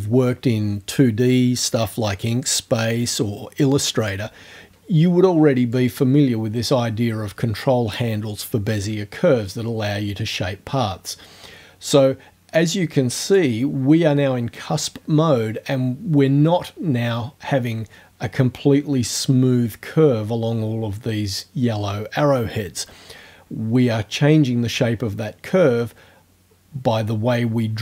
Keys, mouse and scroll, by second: 5.8-13.5 drag, 24.5-27.8 drag.